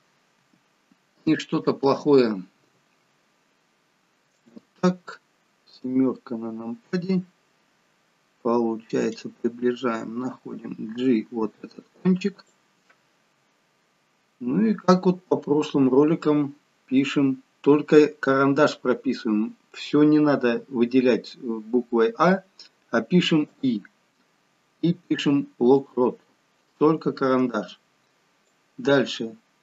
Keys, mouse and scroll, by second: 0.4 g, 2.5 r, 5.8 KP_7, 8.6 scroll up 3, 10.3 g, 15.4-15.9 scroll down 1, 23.6 i, 28.5 click.